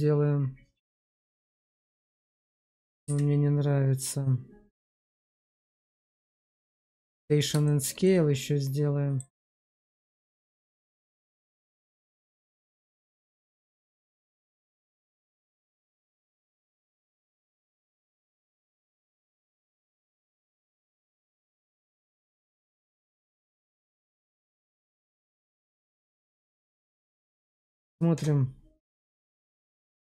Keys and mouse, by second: 1.6 click, 2.1 Tab, 2.9 q, 5.0 ctrl+a, 7.6 shift+middle click, 7.9-9.1 middle drag, 9.5 click, 10.1 middle click, 10.4 shift+middle click, 11.3 Tab, 11.9 click, 13.0 shift+click, 13.2 shift+click, 14.4 ctrl+b, 23.0 shift+click, 23.4 Tab, 24.0-25.7 middle drag, 26.1 shift+middle click, 27.8 click, 28.9 click.